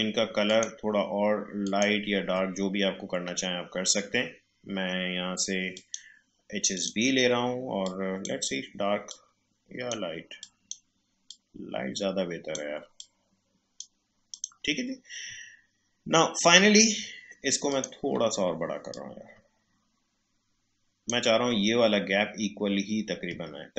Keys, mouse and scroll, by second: 5.7-14.3 drag, 15.5 alt+scroll up 1, 16.2 alt+scroll down 1, 17.0 alt+scroll up 1, 17.6 click, 23.4 alt+scroll down 1.